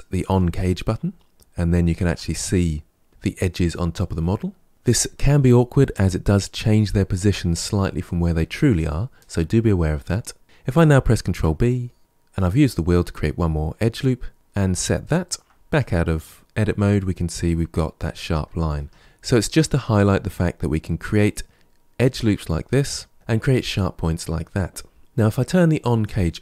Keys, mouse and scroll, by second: 0.3 click, 1.7 alt+click, 11.1 ctrl+b, 15.5 Tab, 16.6-18.6 middle drag, 18.6 Tab, 19.0-19.6 shift+middle drag, 19.6-22.6 scroll up 1, 23.1-25.0 middle drag, 25.9 click.